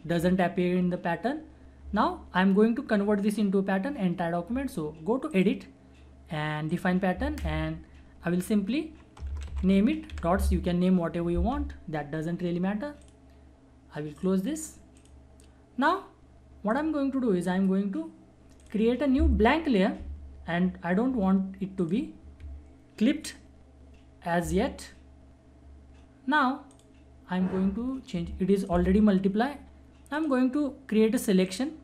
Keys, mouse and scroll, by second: 5.3 click, 9.1-10.6 typing, 13.0 click, 13.0 click, 21.8 alt+click, 26.7-31.8 drag.